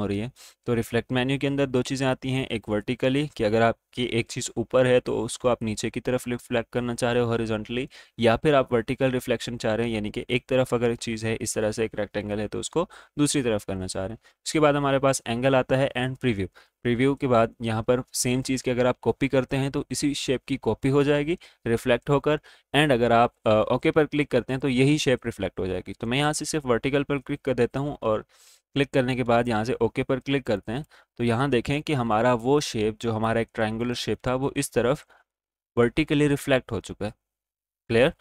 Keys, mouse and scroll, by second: 29.3 click.